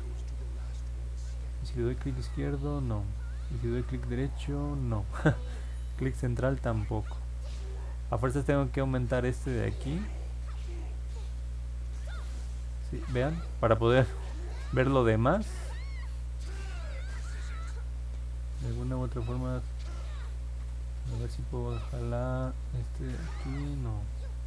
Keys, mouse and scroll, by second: 1.5-2.8 drag, 3.9-4.9 right drag, 5.8-6.8 middle drag, 9.1-14.7 drag, 19.8 click, 22.4-24.4 drag.